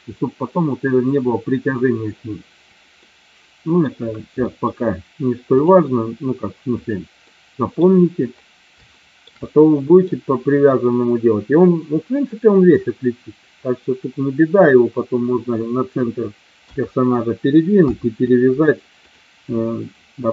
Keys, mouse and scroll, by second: 3.2 middle click, 4.5 shift+middle click, 5.6 click, 6.8 click, 7.4 middle click, 9.1 shift+middle click, 9.6 middle click, 16.7 KP_1, 17.8 KP_3, 19.2-20.0 drag.